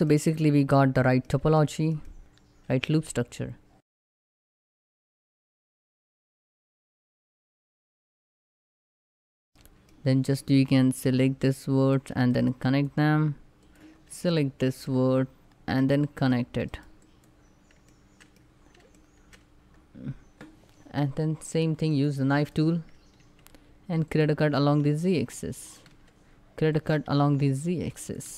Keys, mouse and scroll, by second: 7.3 middle click, 8.1-8.6 shift+scroll up 2, 8.8 click, 9.3 middle click, 10.0-11.4 shift+middle drag, 11.4 shift+click, 12.1 right click, 12.2 click, 13.6 scroll down 1, 14.1 shift+middle click, 14.6 scroll up 1, 15.7 shift+click, 16.3 right click, 16.7 click, 17.1 scroll down 1, 17.6 shift+middle click, 18.1 scroll up 1, 18.7 shift+middle click, 19.1 scroll up 1.